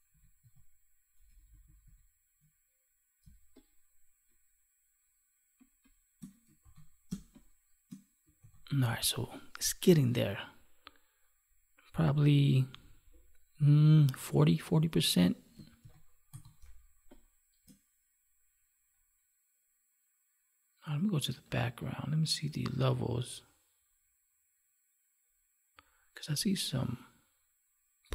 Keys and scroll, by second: 3.2 space, 6.5 ctrl+s, 7.0 space, 8.4 ctrl+s, 15.8 ctrl+s, 16.5 space.